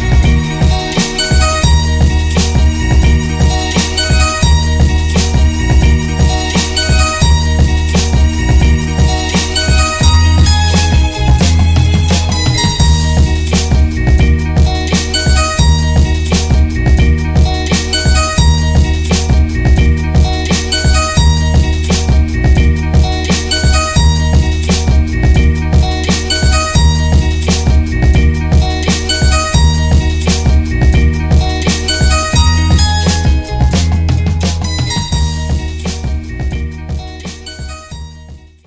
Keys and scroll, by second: 7.5 alt+-, 9.9 Tab, 10.1 Tab, 13.1 ctrl+c.